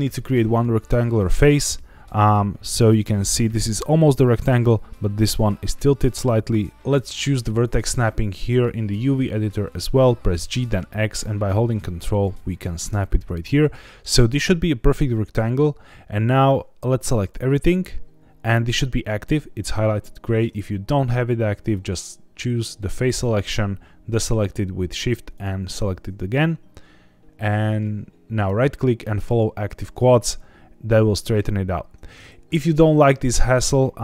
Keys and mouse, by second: 2.8 click, 3.8-4.5 drag, 6.7 Escape, 6.7 g, 6.7 y, 6.7 `, 7.0-9.1 drag, 10.3 g, 10.6 x, 12.7 ctrl+click, 13.6 click, 16.4 click, 28.4-29.4 right drag.